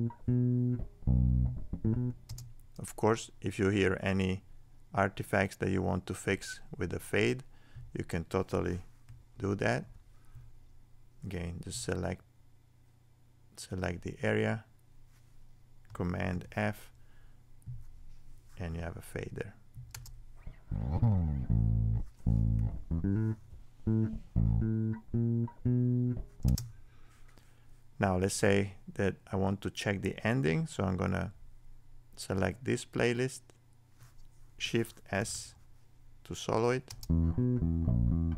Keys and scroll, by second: 16.3 super+f.